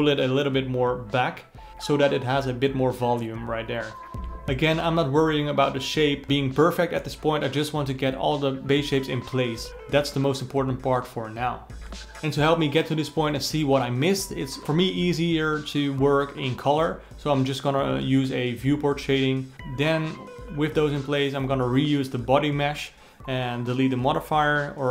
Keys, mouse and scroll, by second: 0.5 click, 1.3 alt+middle click, 1.4-3.3 alt+middle drag, 3.8 ctrl+middle click, 4.2-4.9 scroll down 12, 5.4-7.1 drag, 7.1-7.4 scroll down 3, 7.9 ctrl+v, 9.7 ctrl+v, 10.6-11.7 alt+middle drag, 13.1 ctrl+c, 13.5-15.0 scroll down 16, 15.0 ctrl+v, 15.6 d, 16.1 d, 16.6 ctrl+middle click, 17.0 Tab, 17.7 middle drag, 17.9-19.0 drag, 19.0 shift+d, 20.3 Tab, 21.2 Tab, 21.4 click, 22.6-24.9 drag.